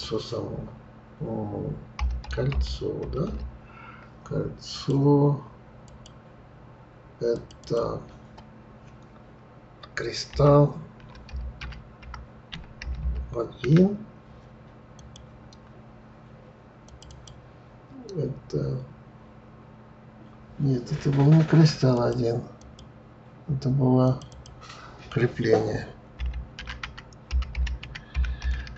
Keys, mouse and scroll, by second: 5.8 click, 7.3 click, 7.6-10.6 drag, 16.8 click, 17.0-20.1 drag, 22.6 click, 24.0 click, 24.3-27.3 drag.